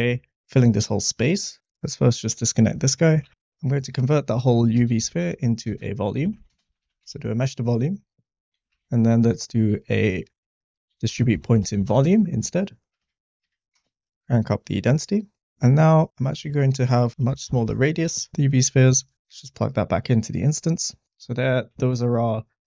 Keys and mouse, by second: 1.4 click, 1.6 ctrl+x, 2.1 drag, 2.8 middle click, 3.2 shift+a, 8.4 click, 8.7 shift+a, 12.9 Down, 14.9 click, 15.8 click, 17.1 click, 18.9 drag, 20.4 click, 21.9 shift+middle click.